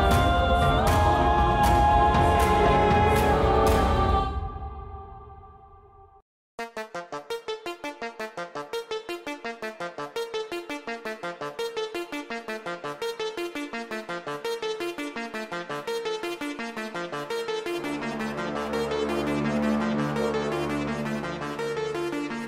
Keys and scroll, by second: 5.9 Tab, 16.2 shift+z, 18.3 e, 22.3 s.